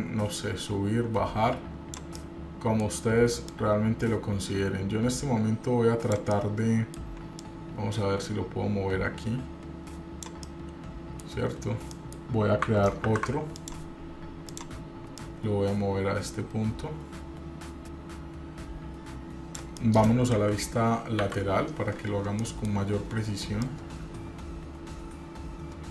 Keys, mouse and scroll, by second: 2.4 middle click, 2.4 scroll down 1, 3.7-6.3 drag, 6.5 middle click, 7.6-10.6 drag, 10.6 middle click, 11.6-12.1 scroll up 1, 12.1 middle click, 13.2 ctrl+r, 15.3-19.8 drag, 20.0 middle click, 20.5 KP_1, 21.4 KP_1, 21.5 KP_3, 21.9-22.5 scroll up 2, 22.5 shift+middle click, 23.0-23.4 scroll up 1, 23.8-25.9 drag.